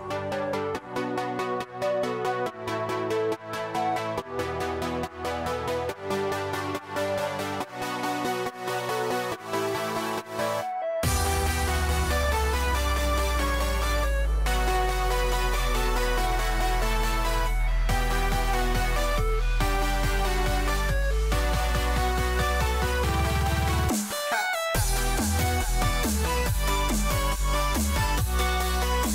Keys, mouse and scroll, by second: 4.8 s, 15.6 g.